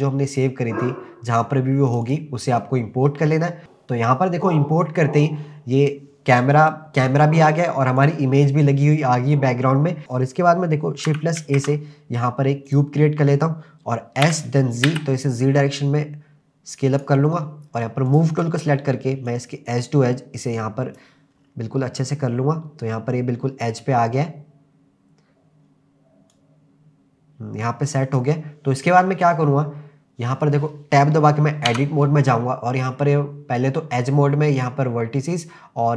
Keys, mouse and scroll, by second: 8.0 click, 10.0 KP_0, 10.1-11.1 scroll up 1, 11.4 shift+a, 14.2 s, 14.9 z, 17.0 click, 18.1 click, 19.3 click, 21.4 scroll up 2, 22.4-23.2 scroll up 1, 23.2-24.5 scroll down 3, 26.3 click, 31.7 Tab, 34.6 click.